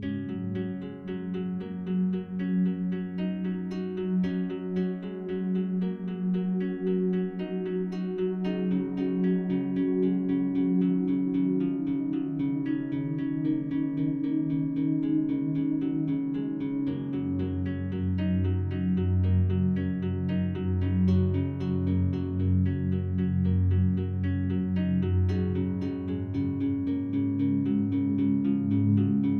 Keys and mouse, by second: 0.2-1.5 drag, 2.2 typing, 2.9 click, 3.7-4.9 drag, 5.4 ctrl+alt+click, 6.8 click, 7.6-10.1 alt+drag, 10.7-15.6 drag, 15.6 ctrl+l, 16.8-18.2 typing, 19.0 click, 19.6-20.1 alt+drag, 21.0 click, 22.2 ctrl+l, 22.2 click, 23.1 alt+click, 23.6 ctrl+alt+click, 24.0 alt+shift+click, 24.5-26.5 alt+drag, 26.6 ctrl+i, 26.7-27.5 alt+shift+drag, 27.7 alt+click, 28.5-29.3 alt+drag.